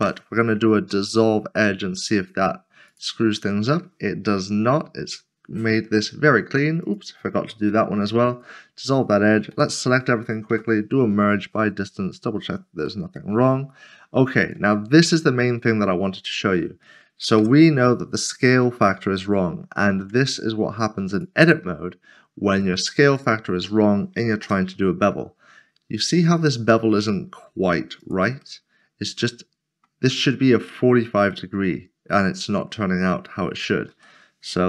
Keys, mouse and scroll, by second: 2.7 x, 2.9 click, 3.7 middle click, 6.8 click, 7.7 x, 8.3 click, 9.5-10.5 typing, 11.1 click, 12.9 middle click, 16.2 click, 16.4 middle click, 17.4 Tab, 20.0 Tab, 23.2 shift+click, 24.3 ctrl+b, 28.0 click, 28.4 middle click, 33.9 ctrl+z.